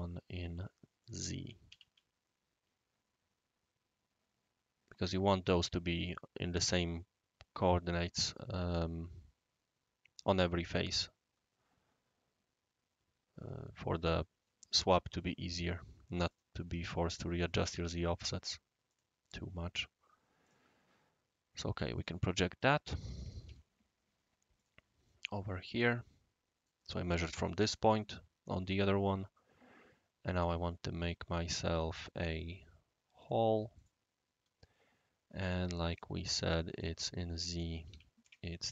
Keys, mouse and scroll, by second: 1.0 click, 1.7 ctrl+c, 5.1 right click, 16.3 click, 17.1 click, 17.3 ctrl+click, 17.7 ctrl+c, 18.9 click, 20.4 click, 21.9 click, 22.6 right click, 23.5 u, 24.6 click, 31.9 click, 33.2 click, 33.7 click, 35.4 d, 35.9 click, 36.7 click, 37.5 click, 37.8 ctrl+v, 38.2 shift+click.